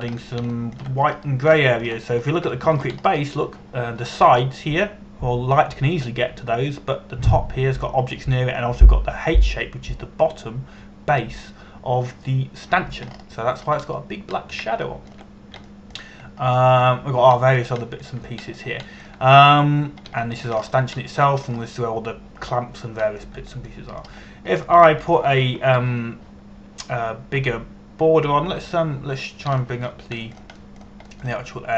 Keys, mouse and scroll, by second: 0.2 shift+middle click, 0.9 scroll up 1, 1.3 shift+middle click, 1.8 scroll up 2, 2.2 shift+middle click, 2.7-3.3 scroll up 2, 3.3 shift+middle click, 3.8-4.1 scroll up 1, 4.2 shift+middle click, 4.6 scroll up 1, 11.8-12.8 scroll down 1, 14.7-15.5 scroll up 1, 15.5-16.2 scroll down 1, 16.5 shift+middle click, 17.3 shift+middle click, 18.1-19.1 scroll up 1, 19.1 scroll down 1, 19.4 shift+middle click, 20.2 scroll down 1, 20.5 shift+middle click, 21.0-21.7 scroll down 1, 21.9 shift+middle click, 22.2 scroll up 1, 22.6 middle click, 23.2 scroll up 1, 24.8 scroll down 1, 25.3 middle click, 26.2 scroll down 1, 26.5 shift+middle click, 29.0 Tab, 31.2 shift+middle click.